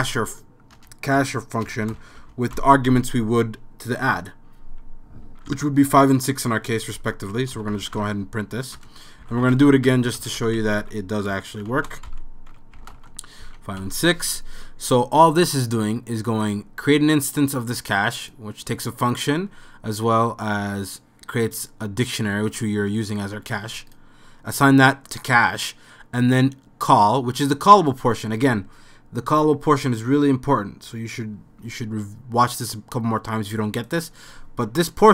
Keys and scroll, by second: 0.0-2.7 typing, 5.0-5.8 typing, 7.3-13.4 typing, 8.4 End.